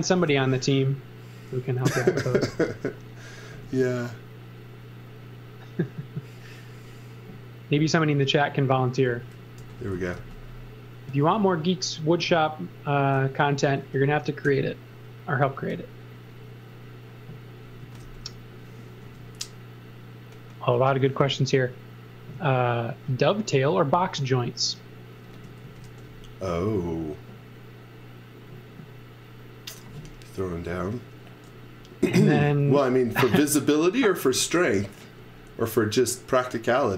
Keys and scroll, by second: 0.0-0.2 typing, 1.8-3.5 typing, 8.8-10.6 typing, 14.4 r, 17.5-19.0 typing, 25.3-26.3 typing, 32.6 x, 33.0 v, 36.5-36.9 typing.